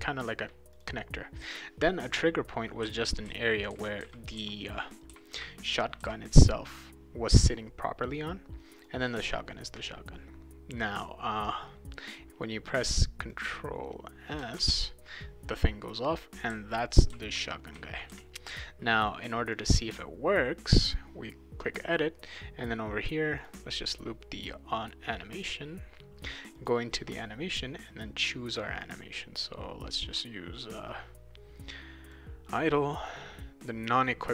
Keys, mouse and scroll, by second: 0.7 click, 1.4 click, 2.3-6.5 right drag, 2.6-6.0 typing, 8.7 click, 11.4 click, 13.3 click, 14.6 ctrl+s, 16.0-19.1 right drag, 16.5-18.9 typing, 19.5 click, 20.8 click, 23.4 click, 25.4 click, 26.4 click, 26.6 click, 28.5 click, 28.8 click, 30.9-32.1 drag, 33.0 click.